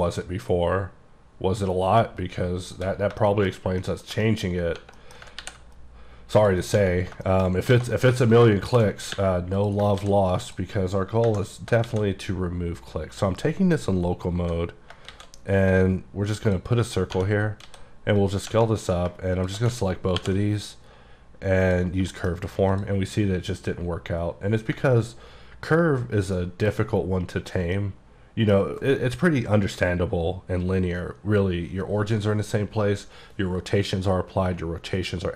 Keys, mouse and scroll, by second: 3.3 shift+middle click, 3.6-3.9 shift+scroll down 2, 3.9 middle click, 4.5-4.9 scroll up 3, 5.1 middle click, 5.5 ctrl+r, 5.7-6.5 scroll up 2, 6.5 click, 6.7 right click, 7.1-7.8 scroll down 5, 7.3 shift+middle click, 7.8 alt+a, 8.0 middle click, 8.4 click, 8.8 shift+s, 9.6 click, 10.1 shift+s, 10.5 click, 11.3 KP_Divide, 11.9 shift+a, 15.2 shift+a, 16.5 click, 17.7 s, 18.3 click, 18.9 click, 19.1 shift+click, 19.8 click, 20.3 ctrl+p, 21.7 click, 22.1-22.8 shift+scroll up 2, 22.2 shift+middle click, 22.8 click, 25.3-26.1 ctrl+scroll down 1, 26.1 scroll down 1, 26.4 middle click, 27.9 middle click, 28.6 scroll down 1.